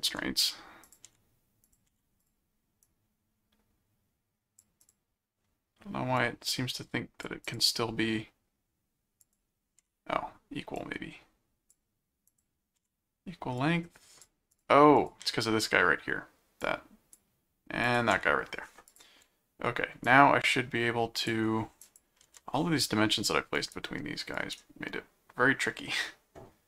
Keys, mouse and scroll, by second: 0.9 click, 1.6 click, 2.2 click, 2.8-4.6 drag, 4.8 click, 6.2 click, 7.4 click, 9.2 click, 10.7 click, 11.9-12.2 scroll up 2, 12.3 click, 13.6 click, 14.5 click, 16.6 click, 17.8 click, 18.9 click, 20.0 click, 21.8 click, 23.6 right click, 24.3 right click.